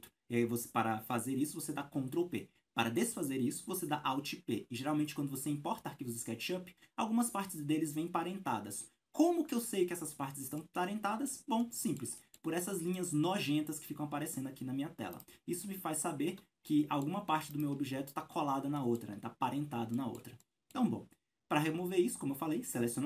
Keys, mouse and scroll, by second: 7.5 scroll up 1, 11.6-12.0 middle drag, 12.2-15.2 shift+middle drag, 13.0-13.8 scroll up 2, 14.1-14.9 scroll down 2, 15.2 right click, 16.4 Escape, 16.7 middle click, 17.8 right click, 18.4 Escape, 19.0-23.0 middle drag, 19.5 scroll down 1.